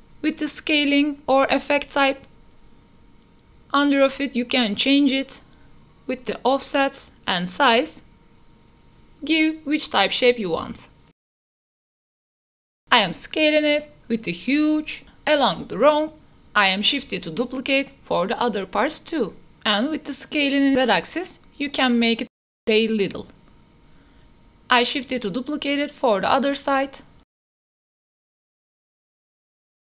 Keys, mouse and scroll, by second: 2.4 middle click, 2.4-3.2 scroll down 2, 2.8-3.2 middle drag, 3.2-4.6 drag, 5.0-5.6 drag, 6.0-6.6 drag, 7.8 click, 9.6-11.0 drag, 12.8 s, 13.8 g, 13.9 x, 14.7 shift+click, 15.0-17.5 typing, 16.5 drag, 18.4-18.7 drag, 18.7 g, 18.8 y, 19.4 click, 19.5 shift+middle click, 19.8 middle click, 20.1 shift+middle click, 20.6 shift+d, 20.8 y, 22.1-23.6 typing, 25.0 shift+middle click, 25.4-26.2 middle drag, 26.3-28.4 typing, 27.1 click, 29.0 shift+click, 29.2 middle click, 29.2 click, 29.6 KP_0.